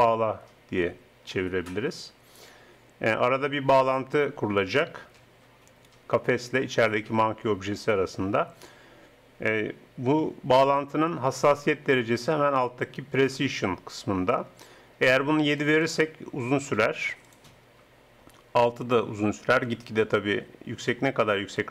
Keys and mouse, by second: 15.6-19.2 drag.